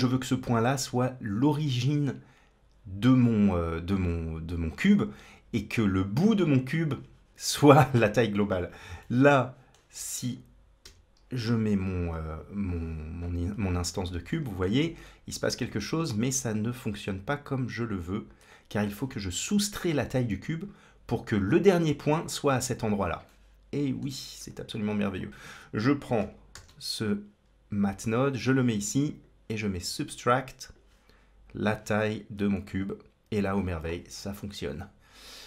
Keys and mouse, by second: 8.8 middle click, 10.1 click, 10.7 m, 14.2 shift+middle click, 16.7-18.7 drag, 23.1 middle click, 24.3 click, 26.4 shift+d, 28.9-30.7 drag, 31.6-32.7 drag, 34.7-35.4 drag.